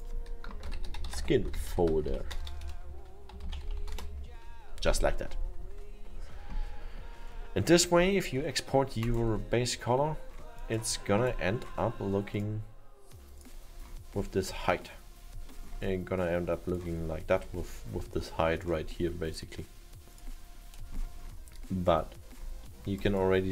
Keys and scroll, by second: 0.4-2.6 typing, 4.0 Return.